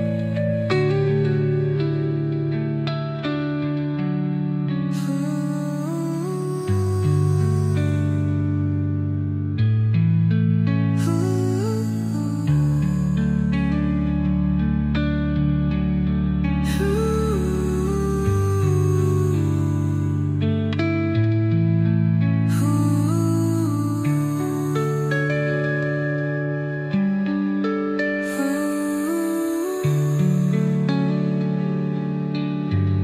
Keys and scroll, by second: 6.8 space, 8.5 Delete, 13.6 Delete, 17.2 space, 21.4 Delete.